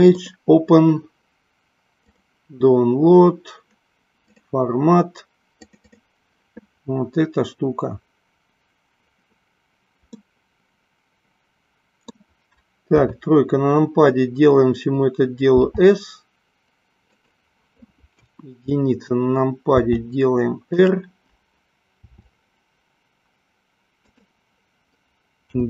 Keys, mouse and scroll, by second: 0.2 click, 10.4-12.2 middle drag, 12.9 KP_1, 15.5 s, 17.2 click, 18.2 KP_1, 19.8 r, 20.8 click, 21.9 r, 24.0 click, 25.5 g.